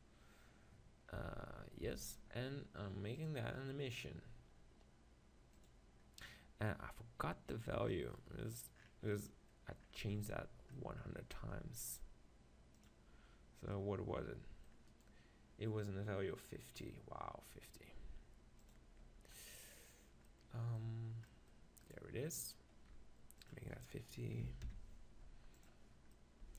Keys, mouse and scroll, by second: 0.0-1.6 drag, 1.2 Tab, 1.9 Tab, 7.6-9.3 drag, 8.1 middle click, 9.3-11.4 middle drag, 11.4 z, 13.0-14.6 drag, 14.6 middle click, 15.6-16.9 right drag, 18.6-20.5 drag, 19.6-25.6 middle drag, 21.9-25.6 right drag, 26.2-26.5 middle drag.